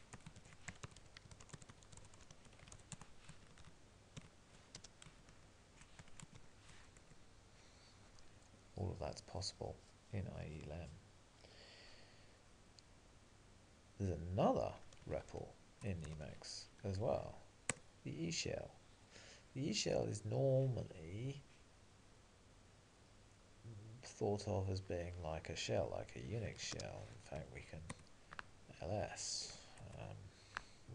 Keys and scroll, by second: 3.0 Tab, 7.0 Return, 14.7 alt+x, 17.9 Return, 28.0 Return.